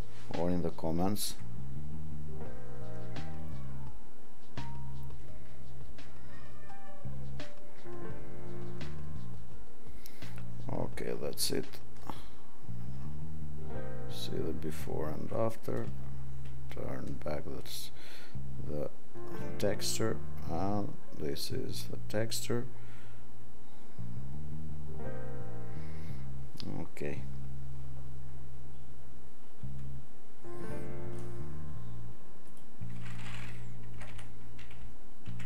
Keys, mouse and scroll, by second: 16.4 click, 17.1 click.